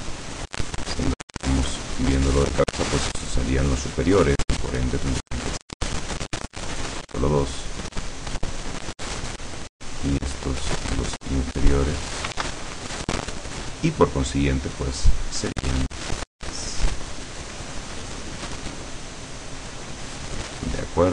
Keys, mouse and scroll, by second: 1.3-3.1 drag, 5.6-7.4 drag, 7.7-9.4 drag, 11.0-12.4 drag, 12.5 ctrl+z, 12.8-14.6 ctrl+drag, 16.6 click, 17.4-19.5 drag, 20.0-21.1 drag.